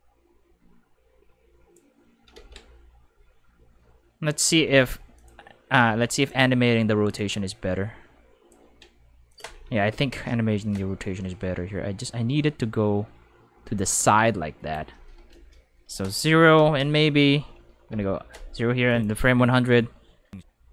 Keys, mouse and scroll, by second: 2.3 ctrl+z, 4.3-6.4 typing, 5.1 click, 6.1 click, 7.1 click, 9.3 click, 9.9 0, 10.1 Return, 10.2 5, 10.7 click, 15.9 click, 16.5 0, 16.8 Return, 17.9 5, 18.9 click.